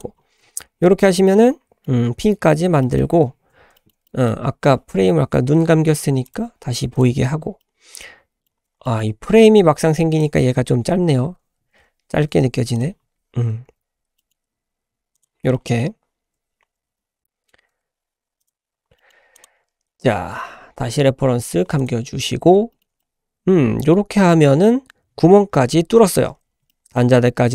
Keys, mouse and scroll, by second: 0.1-1.0 scroll down 2, 1.0 scroll down 1, 1.2-1.8 middle drag, 1.2-1.5 scroll down 1, 2.1 scroll up 1, 2.4-2.8 scroll down 2, 2.8 middle click, 3.3-3.7 scroll up 2, 3.7 shift+middle click, 4.0-5.9 middle drag, 6.2 click, 6.9 click, 7.6-8.5 middle drag, 8.5-8.8 scroll up 1, 8.8 shift+middle drag, 9.2-9.6 scroll up 4, 10.1 click, 10.5 Tab, 11.2 `, 12.7 click, 13.0-13.5 scroll up 1, 13.6 g, 15.4 scroll down 1, 15.5 middle drag, 16.9 Tab, 17.7 Tab, 18.4 click, 18.7 scroll down 2, 18.9 middle click, 19.3 click, 19.5-21.4 scroll down 2, 21.4 click, 21.8-22.1 drag, 22.1 scroll up 1, 22.3 scroll down 1, 22.7 shift+middle drag, 23.0-24.0 middle drag, 26.4 scroll up 1, 26.7 middle drag, 27.0-27.5 scroll up 3.